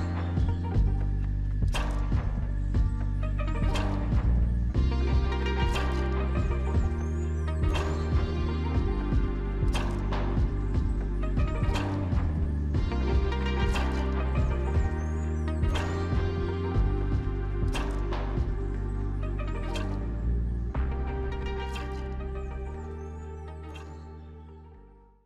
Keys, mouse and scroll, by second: 0.8 double click, 0.9-1.8 typing, 5.9-7.0 typing, 7.4-8.9 scroll up 1, 8.9-9.5 scroll down 1.